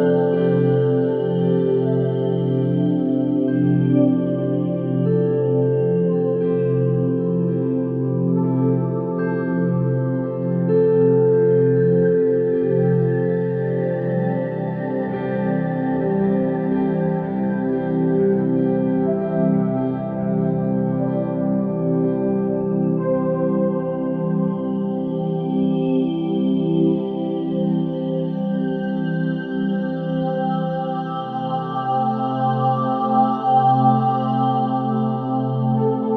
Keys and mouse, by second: 0.9 middle click, 2.1 click, 4.2-5.4 drag, 6.3 m, 7.7 click, 8.9 m, 10.8-14.2 typing, 13.9 click, 20.2 Tab, 20.6 g, 22.7 g, 23.4 r, 25.6-27.7 right drag, 27.7 r, 28.8 g, 29.5 g, 31.6 Tab, 32.0 2, 33.5 middle click, 34.9 middle click, 35.7 ctrl+r.